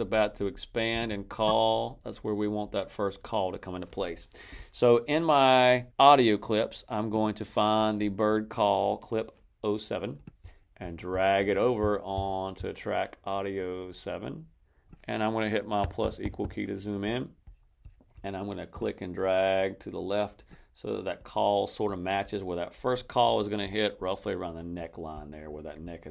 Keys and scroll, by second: 15.7 =.